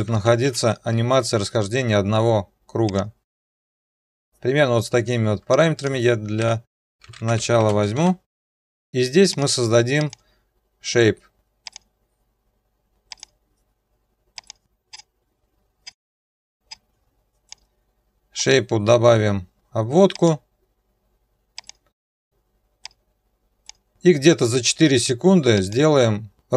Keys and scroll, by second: 0.0-1.1 typing, 8.6 Return.